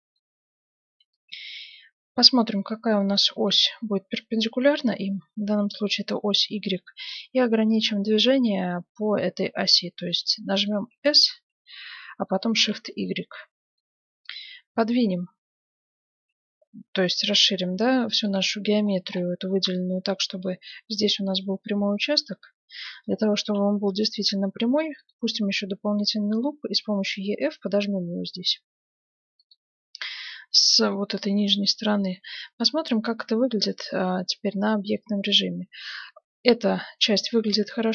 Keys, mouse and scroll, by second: 0.1-2.4 middle drag, 2.9-4.8 middle drag, 10.0-11.7 middle drag, 11.5 s, 11.8 middle click, 18.9-21.0 middle drag, 22.0-23.8 middle drag, 23.4 ctrl+r, 32.1 Tab, 32.9 z, 33.3-35.5 middle drag, 37.3 middle click, 37.7 middle click.